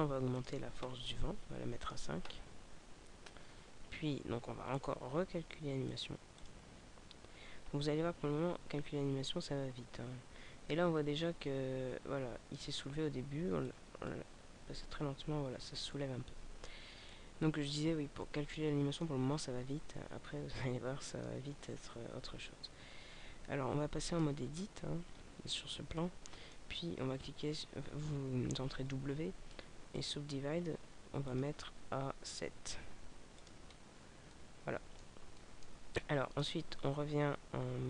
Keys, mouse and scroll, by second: 0.4 click, 4.7 right click, 5.8 click, 13.6 click, 14.4 alt+a, 17.1 click, 20.1-20.6 scroll down 2, 20.6 middle click, 25.0 scroll up 1, 25.5 scroll up 4, 25.8 middle click, 27.4 w, 31.3 click, 34.3 middle click, 35.3 middle click, 36.3 Tab.